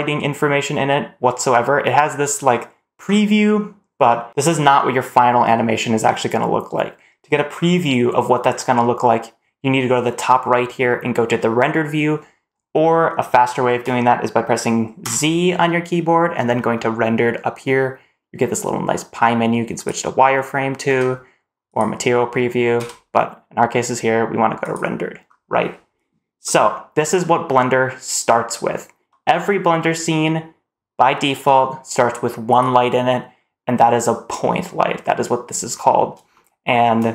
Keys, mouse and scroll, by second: 14.9 z, 20.7 z, 22.7 z, 25.1-26.3 scroll down 1, 26.3 middle click, 32.3 click, 36.2 shift+middle click.